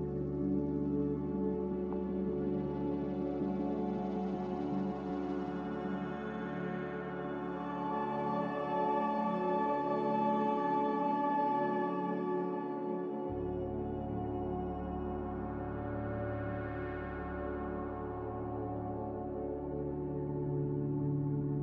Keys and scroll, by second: 0.0-0.2 typing, 1.7 a, 11.0 z, 12.9-13.7 typing, 16.7 typing, 17.0 Return, 19.1 c.